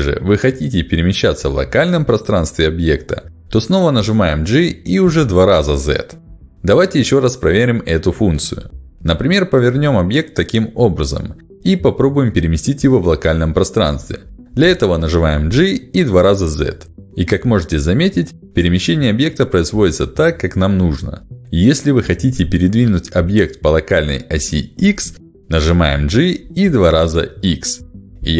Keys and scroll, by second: 4.8 g, 6.2 z, 10.3 y, 15.9 g, 17.0 z, 26.0 g, 26.7 x.